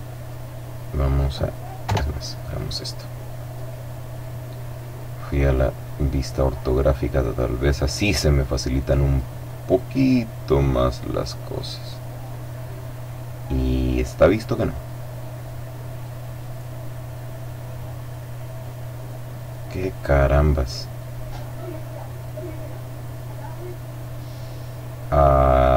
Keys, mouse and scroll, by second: 0.6 click, 1.8 KP_5, 2.2 middle click, 2.3-4.0 drag, 4.0-5.5 middle drag, 5.5 click, 5.7-8.1 middle drag, 9.4 click, 9.6-10.8 middle drag, 13.0-13.6 scroll up 1, 15.0 click, 15.2-16.3 middle drag, 16.3 click.